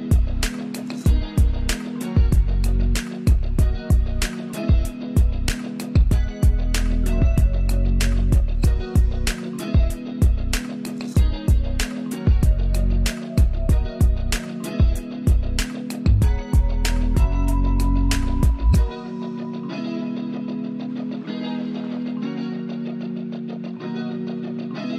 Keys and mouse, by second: 0.4 Down, 2.0 Up, 3.7 ctrl+space, 5.4 ctrl+alt+click, 8.3 ctrl+Up, 15.1 ctrl+Down, 22.2 ctrl+Up.